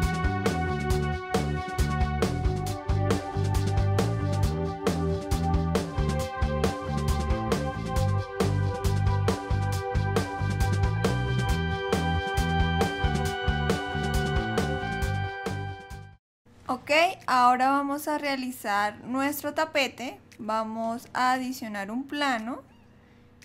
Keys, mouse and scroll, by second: 5.8 click, 6.0 middle click, 6.4 click, 7.3 middle click, 7.6 middle click, 7.8 click, 8.3 shift+d, 8.9 click, 9.1 click, 9.5 click, 9.9 click, 10.3 click, 10.9 shift+d, 11.6 middle click, 12.7 click, 13.4 shift+d, 13.9 click, 14.3 click, 14.6 click, 15.3 shift+click, 15.9 ctrl+j, 16.1 click, 16.3 middle click, 16.3 scroll down 1, 18.9 click.